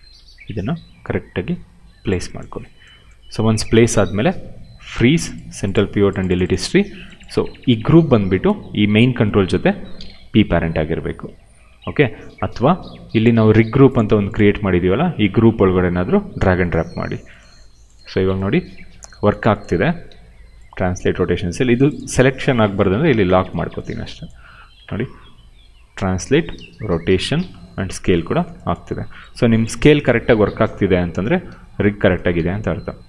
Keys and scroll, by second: 19.7 e, 21.0 ctrl+z, 25.0 w, 26.2 ctrl+z, 26.5 e, 27.0 ctrl+z, 27.3 r, 28.1 ctrl+z, 31.2 ctrl+z, 32.3 w.